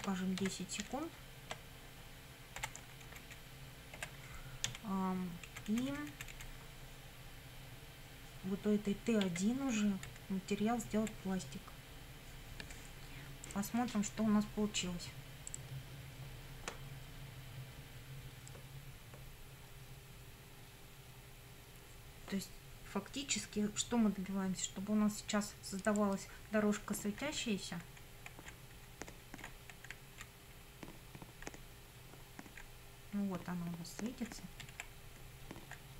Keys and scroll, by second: 0.0-1.3 typing, 2.6 Delete, 3.0 Left, 4.0 BackSpace, 4.7 Down, 5.5 Left, 9.2 1, 10.1 Right, 26.8 Up, 27.3 Right, 28.2 Up, 28.5 Left, 28.8 Up, 29.5 Right, 30.1 Left, 30.5 Up, 34.6 Right, 35.0 Up, 35.8 Left.